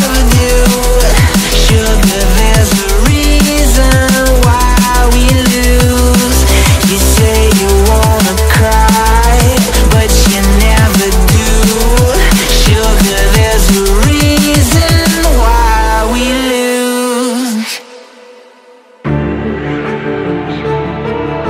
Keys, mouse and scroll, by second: 1.0 ctrl+t, 5.2 ctrl+z, 6.1 ctrl+z, 6.7 ctrl+z, 6.8 ctrl+z, 7.3 ctrl+z, 7.6 ctrl+z, 7.9 ctrl+z, 9.7 ctrl+z, 9.8 ctrl+z, 12.1 ctrl+z, 12.8 ctrl+z, 13.1-15.6 typing, 15.8 double click, 16.0 ctrl+z, 16.2 alt+scroll down 1, 16.6 alt+scroll up 1, 19.6 alt+scroll down 1, 19.9-20.2 alt+scroll up 1.